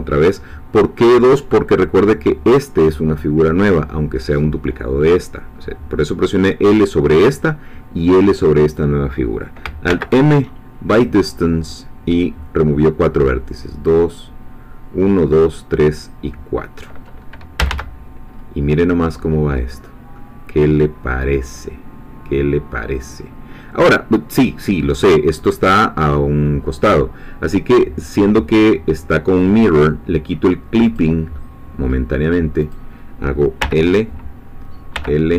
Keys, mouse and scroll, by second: 9.9 alt+m, 10.9 click, 17.6 a, 18.0-18.8 scroll down 2, 18.8 middle click, 19.7-20.0 scroll down 1, 20.2-24.4 middle drag, 24.4 scroll down 1, 24.8-26.6 middle drag, 30.8 click, 31.3-32.6 middle drag, 32.6 click, 33.6 l.